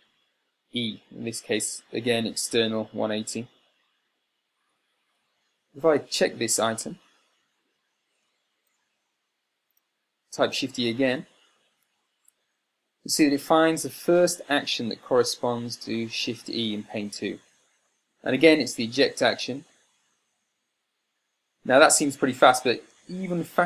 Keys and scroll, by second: 12.2 shift+e.